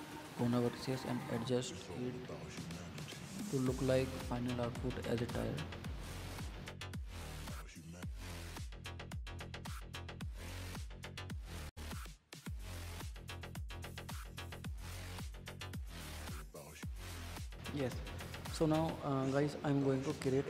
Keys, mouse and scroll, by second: 0.0 Tab, 0.3-1.7 middle drag, 1.7 alt+z, 1.9-3.0 middle drag, 3.0 click, 4.5-5.6 middle drag, 5.6 click, 6.5 middle click, 7.3 click, 8.2-9.8 middle drag, 10.2 Tab, 10.3 middle drag, 10.6 click, 11.0 drag, 11.2-12.2 middle drag, 12.4 click, 12.8 click, 13.3-15.1 middle drag, 15.1 click, 15.5 click, 16.1 click, 16.6 click, 17.5 click, 18.0 click, 18.1 scroll down 3, 18.3 middle drag, 18.5 Tab, 18.9 middle click, 19.7 KP_1, 20.3 scroll up 2.